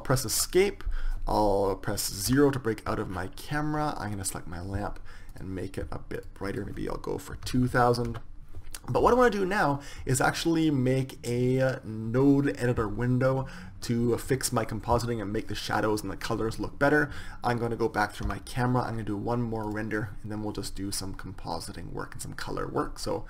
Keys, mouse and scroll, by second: 0.0 Escape, 1.8 KP_0, 3.6-4.8 drag, 4.8 middle click, 5.3-7.8 drag, 7.1 KP_0, 7.2 KP_0, 17.9 KP_0, 19.2-21.1 drag, 23.1 click.